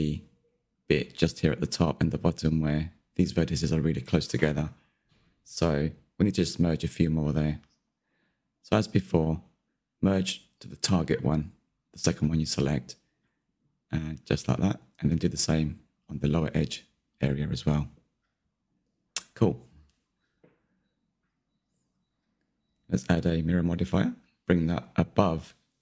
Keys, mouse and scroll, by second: 0.3-0.7 scroll up 1, 0.7 click, 0.8 Tab, 1.3 shift+middle click, 2.0-2.9 scroll up 4, 2.9-4.7 scroll up 1, 4.7-8.1 shift+middle drag, 8.1 click, 8.9-10.7 middle drag, 10.7-11.5 scroll up 1, 11.5 click, 14.0 m, 14.7 click, 16.1 m, 16.2 click, 16.3 scroll down 1, 16.5-17.8 shift+middle drag, 17.8 Tab, 17.9 middle click, 18.3 Tab, 18.4 shift+middle click, 18.9-19.3 scroll up 3, 19.0 shift+middle click, 19.3 click, 19.8 m, 20.0 click, 20.3 m, 20.4 Tab, 20.6 click, 20.7 scroll down 2, 20.8-21.3 middle drag, 21.3-21.6 scroll down 2, 21.6 shift+middle drag, 21.9-24.2 shift+scroll up 1, 24.2-25.8 drag.